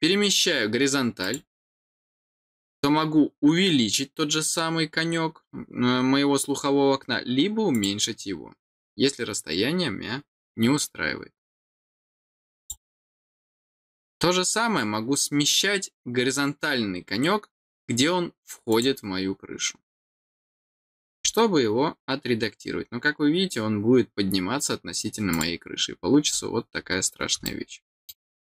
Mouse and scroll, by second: 1.2 click, 7.7 click, 9.1 middle click, 12.5 click, 18.6 click, 21.1-21.5 scroll down 1, 25.2 click, 26.1 scroll down 1, 27.4 middle click.